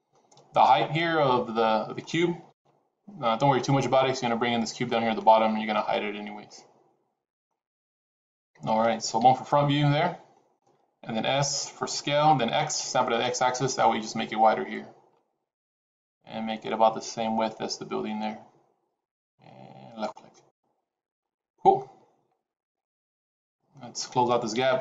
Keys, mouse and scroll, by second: 1.1 middle click, 9.1 KP_1, 12.1 s, 20.2 middle click, 21.3 scroll down 3, 21.7 middle click, 24.5 KP_3.